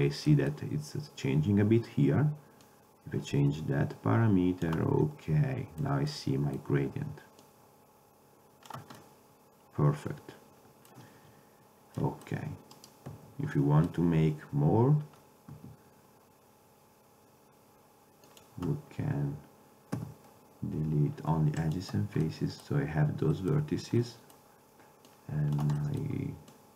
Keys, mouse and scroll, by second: 2.7-4.6 drag, 5.2-5.8 middle drag, 7.5-9.1 drag, 7.5 middle click, 9.1-10.5 middle drag, 12.8 right click, 13.2 Tab, 15.6 s, 20.0 x, 22.3-23.4 middle drag, 23.7 Tab, 25.2-26.7 drag.